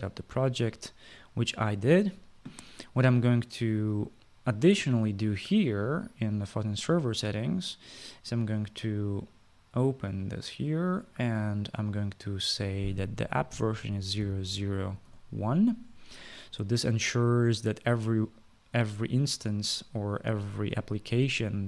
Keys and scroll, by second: 13.9-16.2 typing.